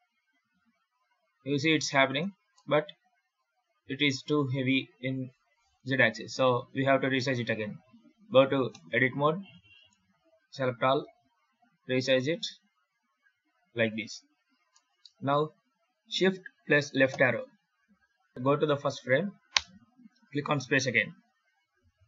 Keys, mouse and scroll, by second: 2.0 space, 2.4 middle click, 8.6 Tab, 9.2 s, 10.0 a, 10.9 s, 13.8 Tab, 14.6 middle click, 17.0 shift+Left, 19.4 space.